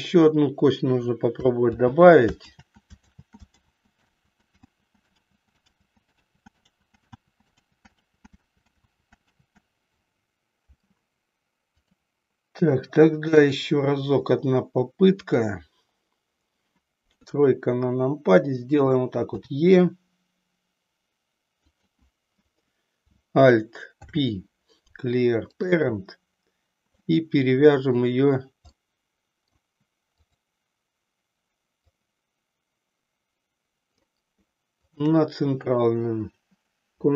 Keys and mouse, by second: 1.9 ctrl+z, 2.8 ctrl+z, 4.4 ctrl+z, 4.9 ctrl+z, 5.4 ctrl+z, 11.9-13.6 drag, 15.2 click, 17.0 KP_3, 19.4 e, 21.8 click, 23.9 alt+p, 27.0-28.1 middle drag, 28.9 middle click, 30.4 click, 32.0-34.0 drag, 34.8 shift+click.